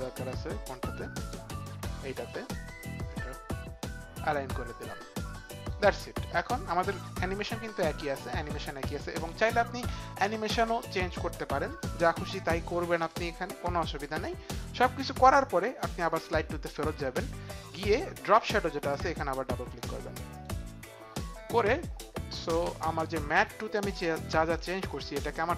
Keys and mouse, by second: 1.2 click, 2.3 click, 3.1 click, 7.7 click, 16.2 click, 20.3 click, 23.4 click, 24.9 click.